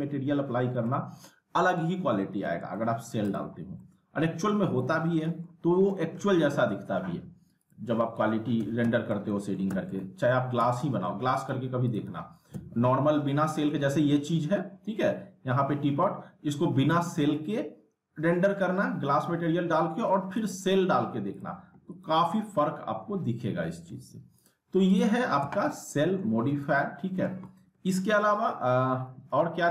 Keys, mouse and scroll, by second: 0.8 alt+middle click, 2.3 z, 2.8 alt+middle click, 3.2 click, 3.8-4.7 alt+middle click, 4.6 scroll up 1, 4.8-5.7 alt+middle click, 5.7 scroll down 1, 5.9 alt+middle click, 7.6 click, 8.6 z, 8.8 z, 9.3 alt+middle click, 9.7 z, 10.0-10.6 alt+middle click, 10.6 z, 10.8 alt+middle click, 11.3 click, 12.1 z, 12.5 z, 17.7 click, 20.1 ctrl+Num_Lock, 20.1 click, 20.4 ctrl+z, 21.3 click, 23.1 F3, 23.8 F4, 24.4 click, 25.4 z, 25.7-26.3 alt+middle click, 26.6-27.2 alt+middle drag, 28.7 F4.